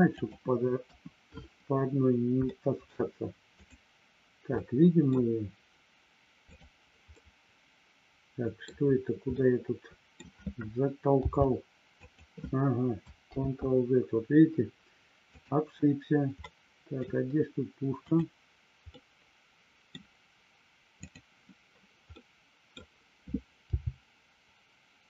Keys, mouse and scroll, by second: 0.8 KP_1, 2.4 shift+middle click, 4.6 middle click, 7.2-8.6 middle drag, 9.3 middle click, 12.0 click, 13.4 ctrl+z, 15.3 click, 16.4 middle click, 18.0 click, 18.8-19.8 middle drag, 20.9 click, 22.0 middle click.